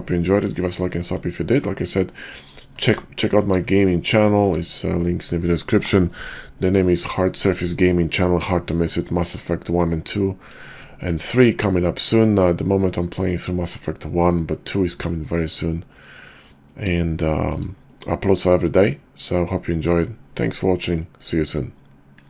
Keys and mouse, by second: 0.0 middle click, 0.9 middle click, 2.0 middle drag, 3.1 middle click, 3.7-4.5 shift+middle drag, 8.9-9.4 shift+middle drag, 10.8 shift+middle drag, 12.0-16.0 middle drag, 17.2-17.5 shift+middle drag, 17.8-20.0 middle drag.